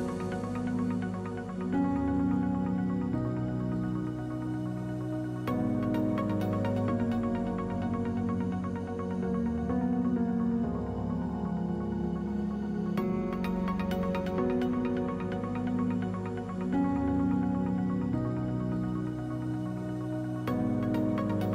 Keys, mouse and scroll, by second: 2.6 ctrl+z, 2.7 ctrl+z, 3.6 middle click, 4.5-5.5 drag, 5.5 middle click, 5.7 click, 7.2-8.4 drag, 8.4 middle click, 9.5-11.8 drag, 11.8 middle click, 12.5-18.6 drag, 18.9 click, 19.2 middle click, 19.8-21.5 drag.